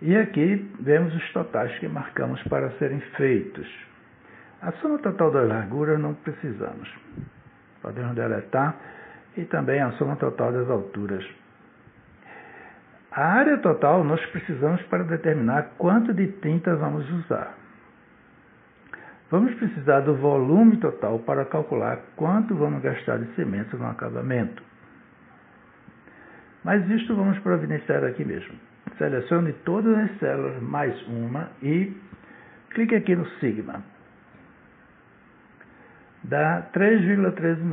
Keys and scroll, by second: 6.6 Delete, 11.7 Delete.